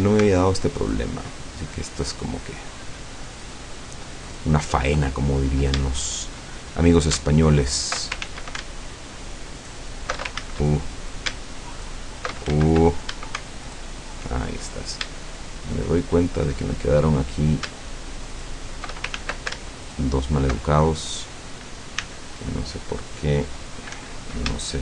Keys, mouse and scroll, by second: 0.8 alt+shift+right click, 2.0 alt+shift+right click, 3.5 alt+shift+right click, 4.3 alt+shift+right click, 5.9-6.6 shift+middle drag, 6.6-7.2 shift+scroll up 2, 7.6 alt+shift+right click, 8.3 ctrl+alt+shift+z, 9.6 alt+shift+right click, 10.4 ctrl+alt+shift+z, 11.8 alt+shift+right click, 12.6 ctrl+alt+shift+z, 13.7 alt+shift+right click, 14.6-15.0 alt+shift+scroll down 4, 15.2 shift+middle click, 16.4-16.7 shift+scroll up 2, 18.4 alt+shift+right click, 19.2 ctrl+alt+shift+z, 19.9 alt+shift+right click, 22.0 c, 22.4-24.0 middle drag, 24.0 Escape, 24.7-24.8 shift+middle drag.